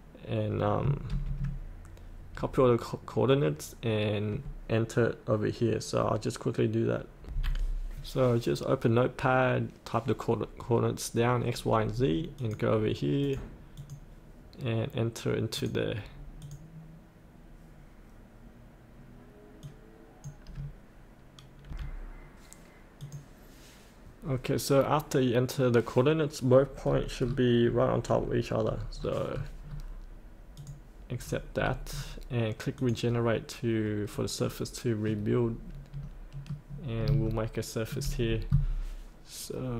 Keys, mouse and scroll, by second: 1.0 ctrl+n, 2.8 ctrl+n, 7.2 F8, 10.0 F8, 12.3-21.1 drag, 21.6 F8, 23.0 click, 26.8-27.2 scroll down 1, 28.6-29.3 scroll up 1, 30.5 click, 31.1-31.5 scroll up 1, 32.7 click, 34.0-34.4 scroll up 1, 34.4 middle click, 35.4 scroll down 1, 36.0 middle click, 36.9 scroll down 1, 37.3 shift+middle click.